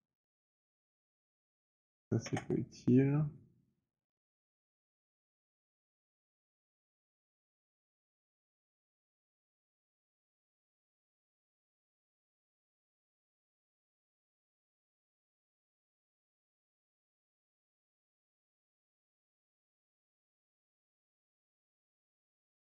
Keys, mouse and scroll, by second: 0.2 click, 0.5 click, 0.9 alt+click, 1.0 shift+click, 1.3 alt+click, 2.4 ctrl+BackSpace, 3.7 middle click, 3.9 scroll, 5.1-5.5 alt+scroll, 5.9 alt+click, 6.6 alt+right click, 9.3 click, 9.5 alt+click, 10.4 ctrl+BackSpace, 10.6 alt+middle click, 14.0 click, 14.3 click, 15.4 ctrl+BackSpace, 17.5 alt+click, 18.4 alt+click, 18.4 alt+right click, 18.8 alt+click, 19.0 click, 19.4 click, 21.0 ctrl+BackSpace, 22.6 alt+click.